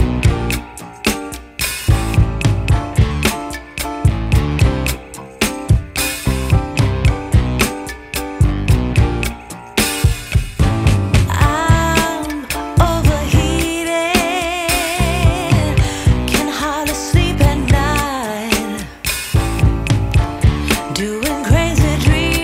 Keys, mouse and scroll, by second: 0.2-1.0 typing, 2.8-5.2 typing, 6.5 click, 7.9 Tab, 9.3 click, 10.3 click, 12.3 click, 13.8 click, 16.3 click, 18.7 click, 19.9 F10.